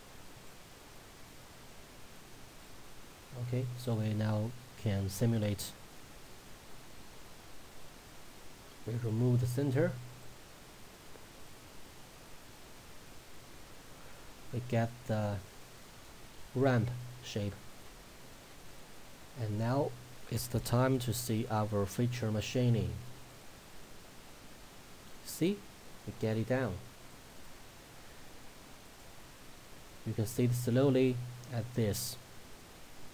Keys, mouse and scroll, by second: 0.4 click, 7.9-9.1 middle drag, 10.2 click, 14.2-16.4 middle drag, 18.8 click, 19.8-20.4 middle drag, 23.4 click, 25.0-25.6 middle drag, 27.1 click.